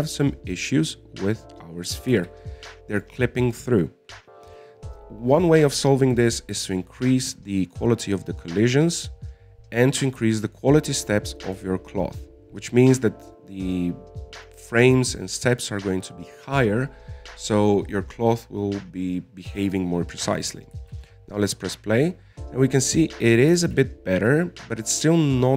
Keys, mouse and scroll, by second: 0.8 middle click, 1.4-3.0 scroll up 2, 3.5 alt+a, 4.3-7.3 drag, 8.9 click, 9.5-11.5 scroll up 22, 11.5-14.5 drag, 14.9-15.3 scroll down 6, 15.3-16.5 scroll up 5, 15.6 middle click, 16.5-19.0 scroll down 22, 22.1 alt+a, 24.4 middle click, 25.1 alt+a.